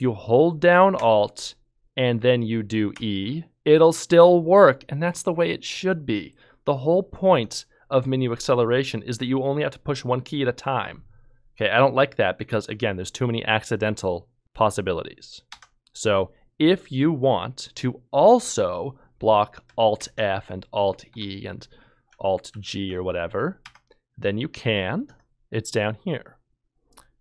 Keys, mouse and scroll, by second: 2.9 r, 3.2 e, 15.5 Escape, 20.0 f, 21.1 Escape, 22.5 g, 23.6 Escape.